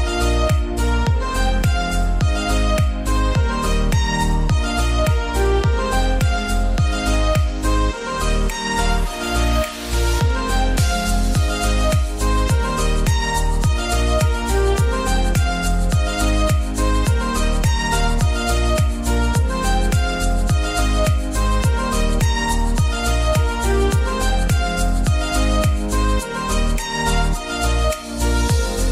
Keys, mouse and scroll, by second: 0.6 click, 5.6-6.4 scroll down 1, 6.4 click, 7.2 scroll down 1, 7.4-8.2 typing, 7.9-8.2 scroll up 1, 9.4 click, 9.6-16.4 drag, 16.4-17.7 scroll down 1, 17.7 scroll up 1, 19.0 click, 21.8 scroll up 1, 22.5-23.9 drag, 23.9-24.4 scroll down 1, 24.4 scroll up 1, 24.4-26.0 scroll down 1, 26.0-26.4 scroll up 1, 26.5-27.2 scroll up 1, 27.2 click.